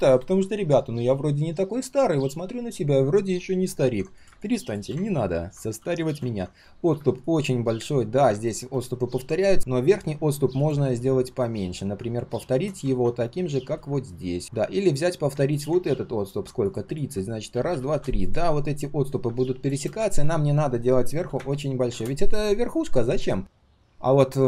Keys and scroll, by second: 12.9 ctrl+z.